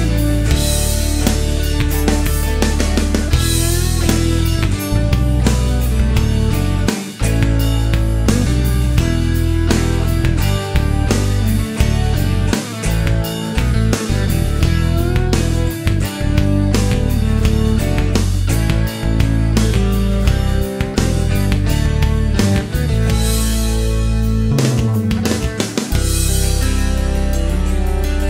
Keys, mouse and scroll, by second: 0.8 click, 1.7 middle click, 2.0-2.4 scroll up 1, 2.6-3.0 scroll up 1, 4.0-4.4 scroll down 1, 4.4 middle click, 4.8-5.2 scroll up 1, 8.8 middle click, 15.8 click, 18.5 click, 20.0 click, 21.1 click, 22.3 click, 24.3 n, 26.2-27.2 scroll down 2, 27.3 middle click, 27.8-28.2 scroll up 1.